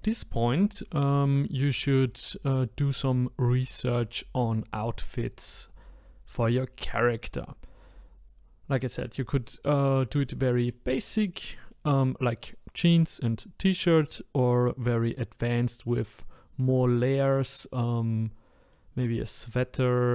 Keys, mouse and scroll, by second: 10.7-16.6 middle drag, 18.7-20.1 middle drag.